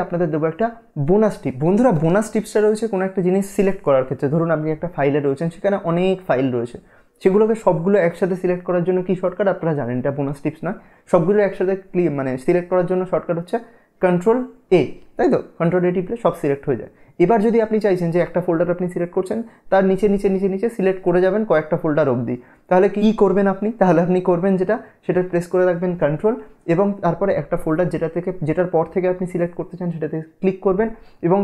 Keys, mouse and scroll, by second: 13.7 Num_Lock, 13.7 Caps_Lock, 13.7 click, 14.8 a.